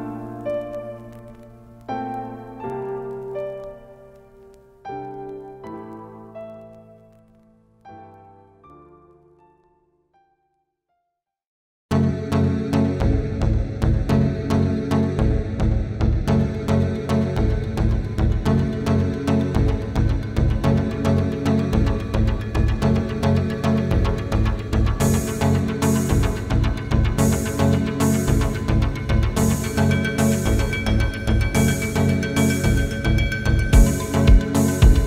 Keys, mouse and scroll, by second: 0.1 space, 0.7-1.7 ctrl+click, 1.0 ctrl+space, 1.6 space, 1.7-2.2 click, 2.0 space, 3.0 click, 3.8-4.8 ctrl+space, 4.8 space, 5.0-6.6 click, 8.2 click, 12.3 Up, 12.6 click, 14.8 typing, 16.6 click, 20.7 right click, 21.3 click, 22.9 typing, 23.0 ctrl+d, 23.5 click, 26.3 right click, 26.7 click, 27.3 scroll down 1, 28.0 click, 32.4 right click, 33.8 ctrl+d, 34.0 space, 34.4 click.